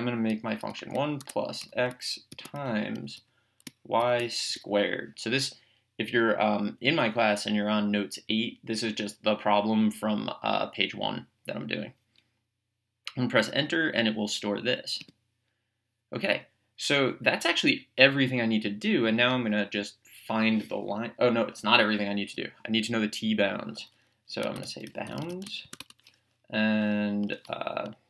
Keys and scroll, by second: 0.7-4.5 typing, 15.0 Return, 19.2 BackSpace, 24.8-25.8 typing, 27.2 Return.